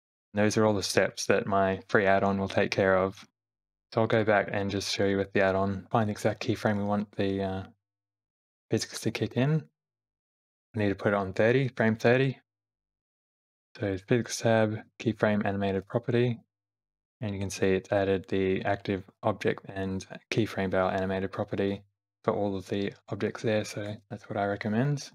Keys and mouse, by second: 4.9 ctrl+z, 5.3 ctrl+z, 5.6 ctrl+z, 5.9 Right, 5.9 Left, 6.4 Left, 6.7 Right, 7.5 Left, 8.2 Right, 9.1 Left, 9.4 Right, 10.1 Left, 12.9 n, 14.3 click, 15.8 click, 24.0 Left, 24.9 Right.